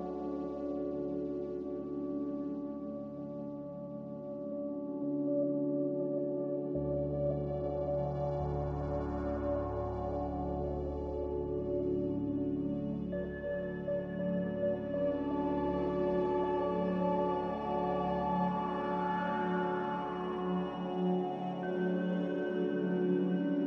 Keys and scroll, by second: 1.9 2, 2.3 Return, 2.3 0, 5.6 x, 8.7 z, 12.3-13.2 typing, 16.1 x, 18.5 z.